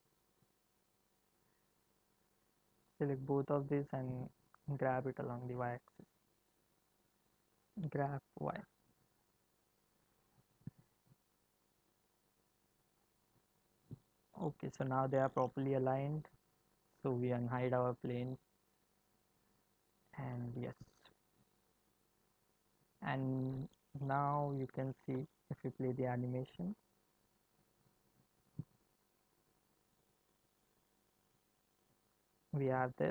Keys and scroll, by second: 7.7 g, 25.0 space.